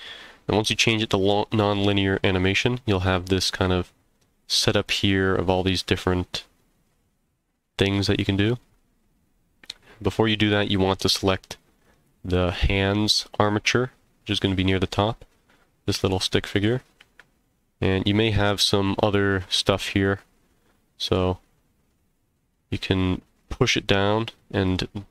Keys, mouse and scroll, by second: 11.7 click, 14.1-14.4 scroll down 2, 14.4 scroll up 2, 23.4 click, 24.6 click.